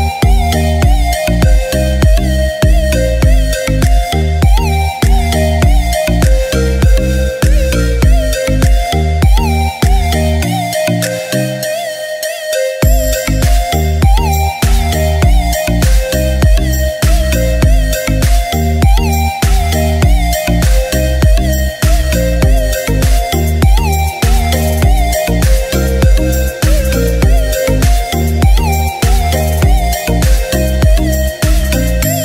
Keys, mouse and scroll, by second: 3.8 c, 4.2 shift+click, 8.1 scroll up 1, 9.1 click, 9.1 typing, 13.3 ctrl+space, 13.9-14.4 scroll down 1, 14.4 click, 16.1 space, 16.2-16.9 scroll down 1, 17.5 g, 18.5 click, 24.5 space, 25.7 right click, 26.4 scroll up 1, 27.0-29.9 drag, 30.4-31.2 scroll up 1, 31.2-32.2 drag.